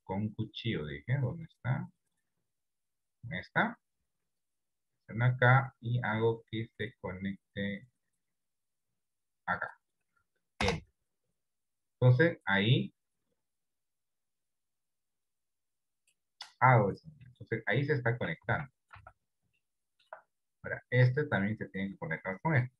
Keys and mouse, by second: 2.6 click, 4.4-11.5 drag, 13.7 click, 15.4 click, 16.8 middle click, 18.6 Tab, 19.0 Tab, 19.7 shift+middle click.